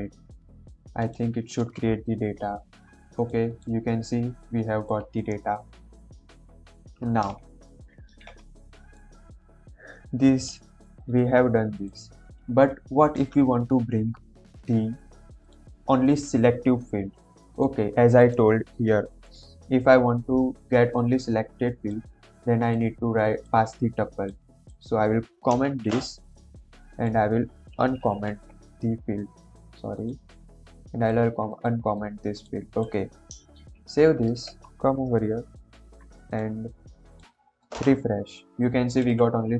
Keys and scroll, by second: 25.6 ctrl+/, 27.9 ctrl+;, 33.6 ctrl+s.